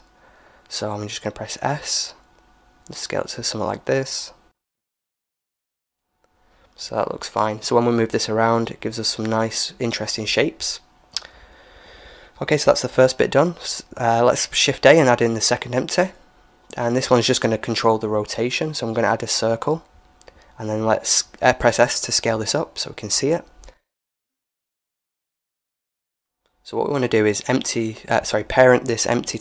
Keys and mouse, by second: 1.2 s, 4.9-7.6 middle drag, 6.6 g, 10.4-14.1 middle drag, 14.1 shift+a, 20.9 s, 24.7 KP_1, 25.6-27.3 middle drag, 27.3-29.4 right drag.